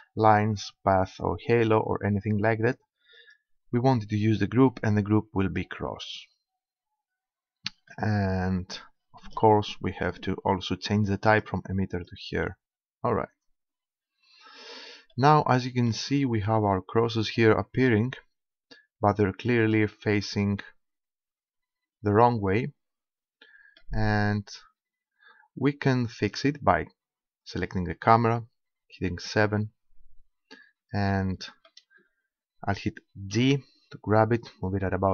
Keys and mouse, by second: 3.2-4.9 drag, 7.7-11.3 middle drag, 11.3-13.2 drag, 15.1 middle click, 16.3-17.3 middle drag, 17.4-19.7 middle drag, 19.7 right click, 20.6 middle click, 20.7 right click, 20.9-22.7 middle drag, 24.3 middle click, 26.4-28.4 right drag, 28.4 middle click, 29.0 KP_7, 33.3 g.